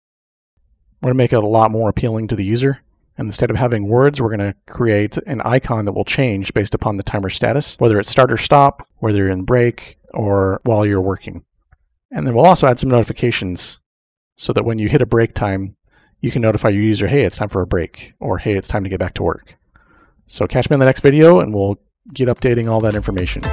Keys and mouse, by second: 23.1 middle click.